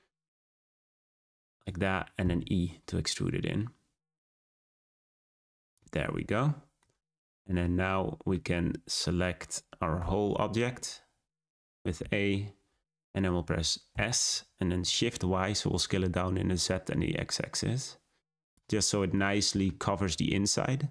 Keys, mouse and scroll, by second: 2.2 e, 5.9-6.3 scroll down 4, 6.3-8.5 middle drag, 8.5-9.5 scroll up 3, 9.9 Tab, 10.5-10.9 scroll down 2, 10.9 Tab, 11.4 a, 12.5 scroll down 1, 12.8-13.8 middle drag, 13.8 s, 18.8-19.8 middle drag, 19.8-20.9 scroll up 3.